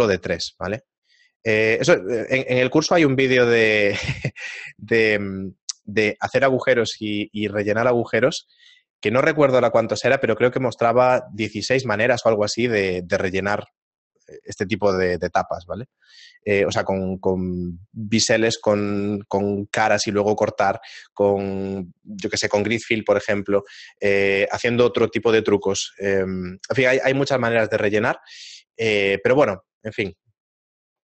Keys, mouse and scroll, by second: 0.5 shift+middle click, 1.3-1.8 scroll down 2, 1.8 shift+middle click, 2.7 Tab, 3.5 x.